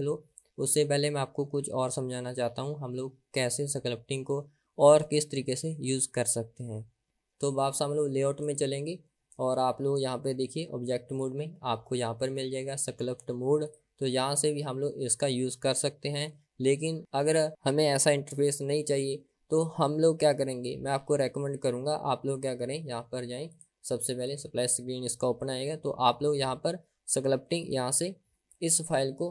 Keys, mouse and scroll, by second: 8.6 click, 11.1-13.9 drag, 23.5-29.3 drag.